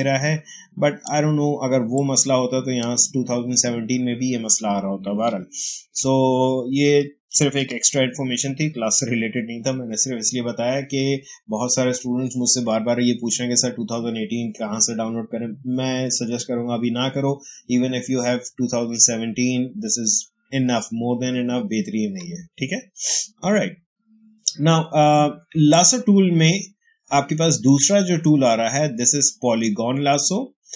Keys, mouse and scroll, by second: 5.7 ctrl+alt+z, 7.4 ctrl+a, 8.0 Delete, 25.9-30.7 drag.